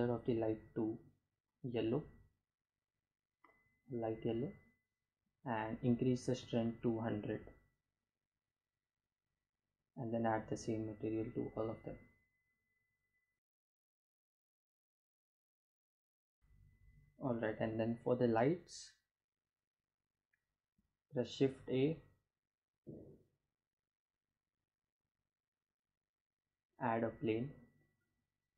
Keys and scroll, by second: 4.6 1, 5.3 0, 5.5 Return, 15.4 ctrl+s, 19.4 shift+a, 28.2 g, 28.3 z.